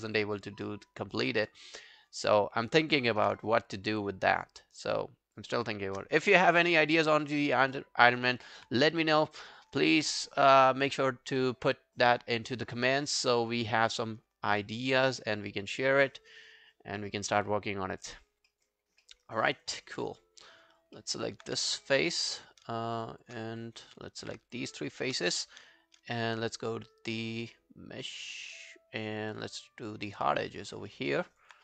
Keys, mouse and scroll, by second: 0.4 shift+click, 2.0 alt+click, 2.9 alt+click, 3.0 alt+click, 3.8 alt+click, 4.2 shift+click, 6.4 alt+middle click, 6.6 alt+right click, 6.8 alt+click, 7.2 alt+middle click, 7.4 alt+right click, 7.6 alt+click, 14.3 scroll down 1, 14.6 alt+middle click, 14.8 alt+right click, 15.3 right click, 16.3 double click, 16.8 alt+click, 17.6 alt+scroll up 2, 17.8 alt+click, 18.2-18.5 alt+scroll down 5, 18.5 alt+middle click, 18.8 alt+scroll up 1, 19.0 alt+middle click, 19.3 alt+right click, 19.5 alt+click, 19.8 alt+middle click, 20.4 scroll up 2, 20.6 alt+click, 21.0 alt+middle click, 21.2 alt+right click, 21.5 q, 23.0 shift+click, 23.2 shift+click, 23.4 scroll down 1, 24.1 alt+right click, 24.5 shift+click, 24.7 shift+click, 25.2 scroll down 1, 30.6 double click, 30.9 alt+middle click, 31.1 alt+right click, 31.3 alt+click.